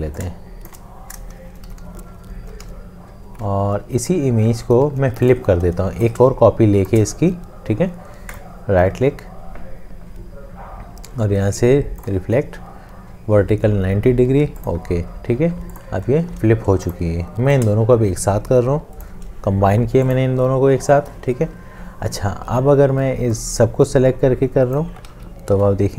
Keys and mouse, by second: 0.5 shift+click, 3.3 click, 4.9 Right, 6.1 alt+click, 17.8 shift+click, 25.5 ctrl+7.